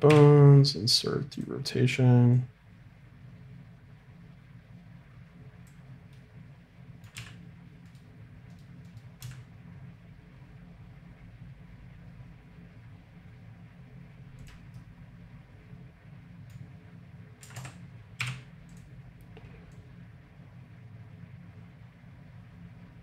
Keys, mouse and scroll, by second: 0.1 i, 2.4-4.3 drag, 6.1-7.1 drag, 7.1 g, 8.5-12.4 drag, 9.2 g, 14.7-16.7 middle drag, 17.4 a, 17.5 a, 18.1 i, 19.7 click.